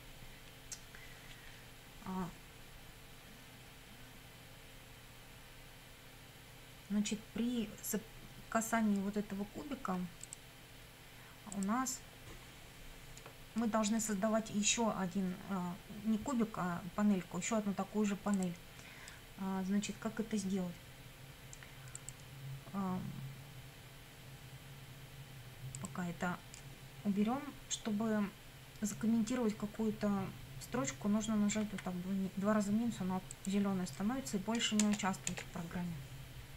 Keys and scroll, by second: 31.6 -, 34.8 Return.